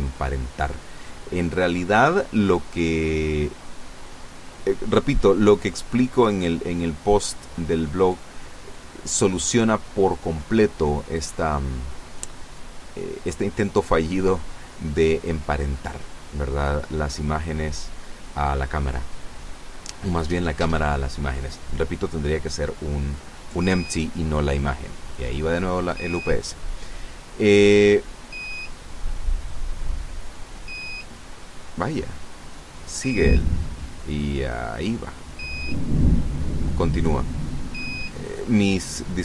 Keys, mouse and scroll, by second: 0.3 click, 6.6 right click, 8.3 r, 9.6 Escape, 10.4 r, 10.9 z, 11.6 Escape, 13.6-14.6 middle drag, 14.7-15.1 scroll down 2, 18.2 r, 19.1 Escape, 19.9 right click, 20.6 right click, 21.6 r, 22.8 Escape, 26.9 right click, 28.7 click, 30.1 right click, 31.2 right click, 32.6 click, 33.7 click, 34.9-36.4 middle drag, 36.4 ctrl+z, 37.2-38.2 ctrl+middle drag.